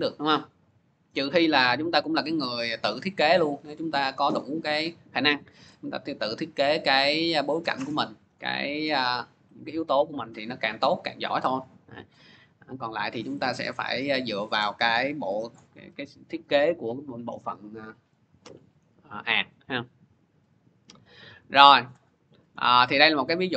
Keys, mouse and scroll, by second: 1.4-6.5 drag, 8.1-13.2 drag, 15.4-20.5 drag, 21.4-23.2 drag.